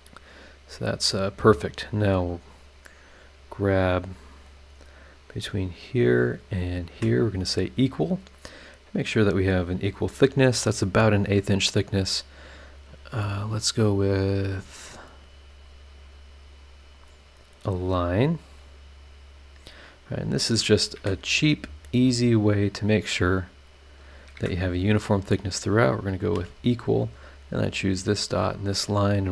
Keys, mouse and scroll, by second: 0.6 click, 1.7 click, 2.6 click, 3.5 click, 4.6 click, 5.0 scroll down 2, 5.4-6.0 scroll up 4, 6.7 click, 6.9 e, 7.3-8.2 scroll down 4, 8.4-9.1 scroll up 4, 12.1 scroll down 2, 12.7 scroll up 2, 14.3 click, 15.1 click, 19.5 click, 20.4 click, 20.9 Escape, 21.9 click, 23.1 click, 23.9 click, 24.3 Escape, 25.3 click, 26.1 click, 26.3 e, 27.3 click, 27.8 click.